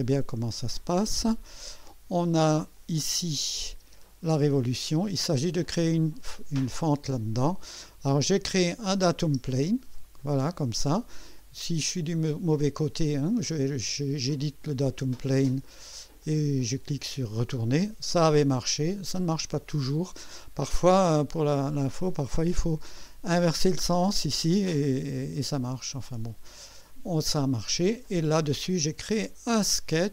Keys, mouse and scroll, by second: 2.8 click, 3.8 space, 8.7 click, 9.2 space, 10.2 click, 11.4 click, 14.4 click, 16.2-16.9 drag, 18.9 scroll down 1, 18.9 click, 21.8 click, 26.1 click, 27.3 click.